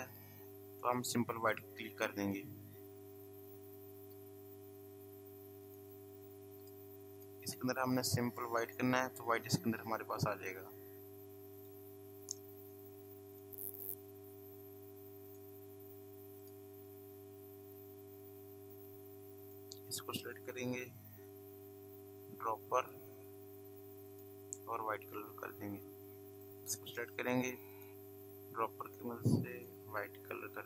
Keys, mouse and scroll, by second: 0.1 click, 4.3 v, 5.7 click, 10.1 v, 11.6 click, 15.3 click, 18.0 v, 20.3 click, 22.8 click, 25.3 v, 26.3 click.